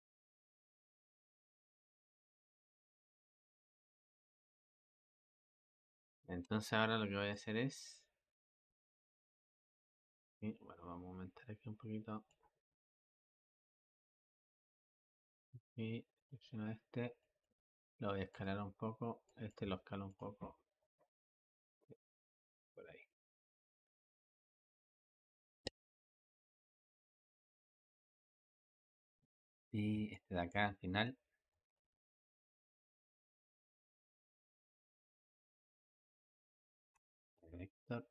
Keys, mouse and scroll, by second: 5.5 click, 6.5 Escape, 7.2-10.2 drag, 13.9 click, 15.3-16.1 drag, 17.0-17.6 drag, 17.6 s, 19.1-19.5 drag, 19.5 s, 20.6-21.2 drag, 21.2 s, 31.3-32.4 drag, 33.8-37.2 drag, 37.2 v.